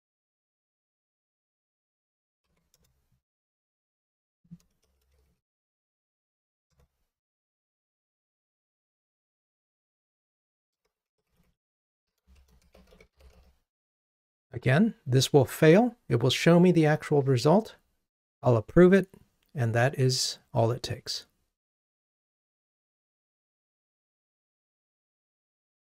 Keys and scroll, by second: 2.0 super+d, 6.8 Return, 14.1 ctrl+r.